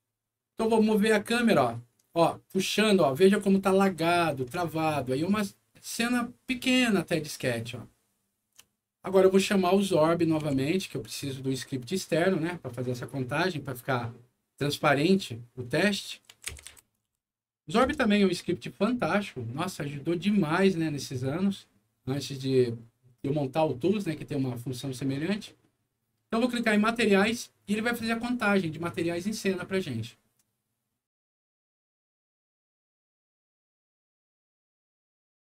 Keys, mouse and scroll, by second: 1.2-4.1 middle drag, 4.8-8.4 alt+middle drag, 9.9 alt+middle click, 10.4 x, 16.0-17.5 typing, 17.8 Return, 20.3 click, 26.6 click, 33.5 click.